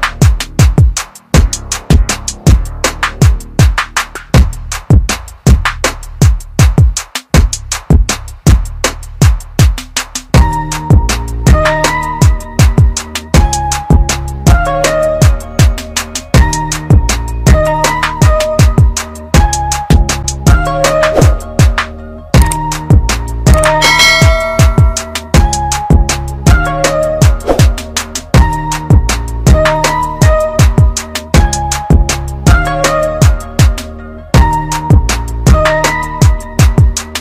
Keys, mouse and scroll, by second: 1.9 click, 3.5 scroll up 1, 8.6 click, 11.6 click, 19.7 click, 21.4-22.8 scroll down 1, 22.8 click, 28.4 ctrl+click, 30.4 ctrl+z, 31.3 click, 33.9 z, 34.5 click.